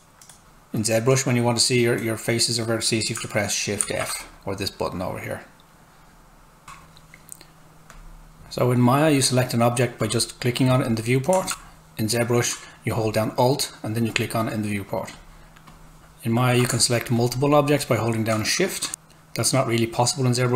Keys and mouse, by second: 3.8 shift+f, 6.6 Tab, 7.9 click, 11.5 alt+Tab, 12.9 alt+click, 16.0 Tab, 17.2 shift+click.